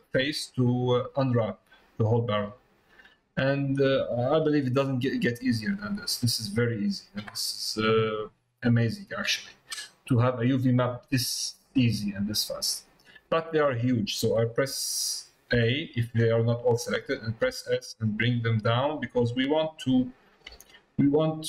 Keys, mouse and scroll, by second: 3.8 scroll down 1, 3.9 middle click, 5.2 middle click, 6.3 middle click, 7.7 middle click, 9.6 middle click, 10.5 middle click.